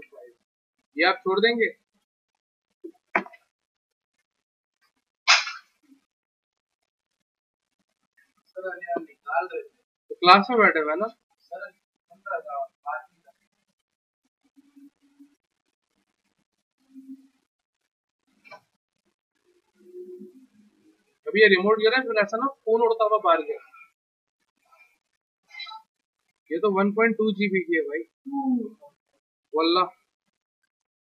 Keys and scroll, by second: 0.0-0.8 typing, 5.4-6.2 typing.